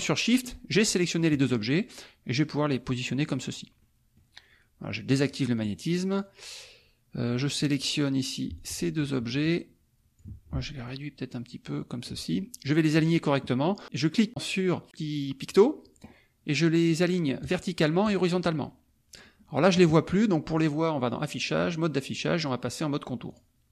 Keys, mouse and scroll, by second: 0.0 shift+click, 1.5-3.5 drag, 3.8 middle click, 5.1 click, 5.6 click, 6.1 click, 7.3 click, 8.5 shift+click, 9.0-10.3 shift+drag, 10.9-12.2 ctrl+shift+drag, 12.3 ctrl+shift+click, 15.5 click, 17.4 click, 18.0 click, 20.5 click, 23.4 click.